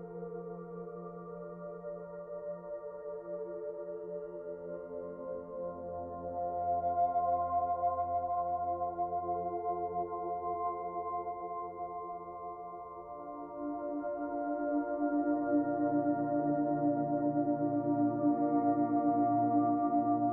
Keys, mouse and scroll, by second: 3.8 click, 10.5 click, 11.8 click, 17.4 click.